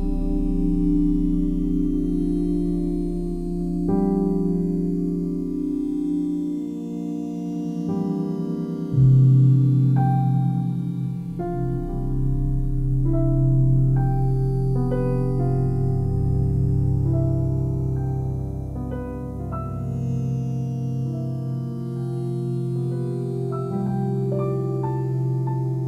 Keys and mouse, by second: 1.6-3.7 alt+drag, 2.1 typing, 4.2 1, 10.1 ctrl+z, 10.4 ctrl+z, 12.0 g, 12.6 Escape, 15.6-17.3 ctrl+alt+drag, 20.4 e, 24.8 Escape, 25.4 ctrl+z, 25.7 ctrl+z.